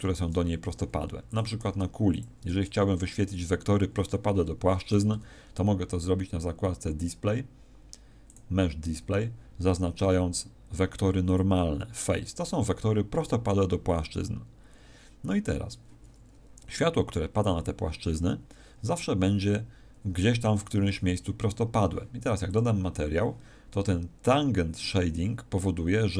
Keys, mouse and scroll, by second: 0.6 g, 1.3 click, 1.5 s, 2.1 click, 2.5 Tab, 3.0-3.7 scroll up 1, 8.2 click, 11.2 click, 12.3-12.6 scroll up 2, 13.2-14.1 scroll up 1, 20.5 Tab, 22.4 click.